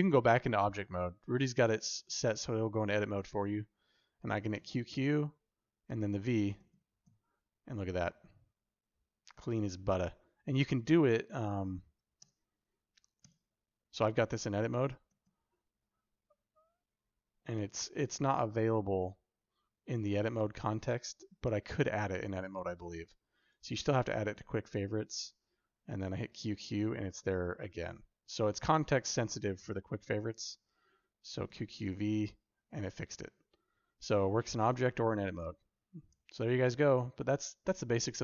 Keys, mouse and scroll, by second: 0.9 alt+z, 4.2 q, 4.4 q, 6.4 q, 6.6 q, 10.9 ctrl+z, 12.2 Tab, 13.1 Tab, 14.9 q, 15.1 q, 23.3 right click, 25.8 q, 25.9 q, 31.2 q, 31.3 q.